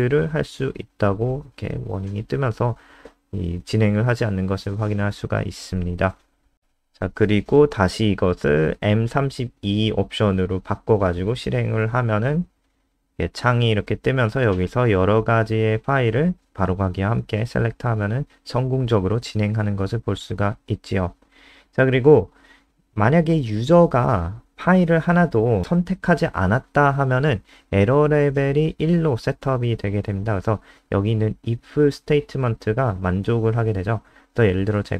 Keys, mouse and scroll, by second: 9.8-10.6 typing, 12.9 ctrl+s, 13.2 F5, 14.2 click, 16.9 Return, 18.0 click, 22.8 ctrl+c, 23.0 click, 23.6 shift+Home, 24.0 shift+Up, 24.4 ctrl+v, 26.2 click, 28.3 ctrl+s, 30.5 click, 30.8 F5.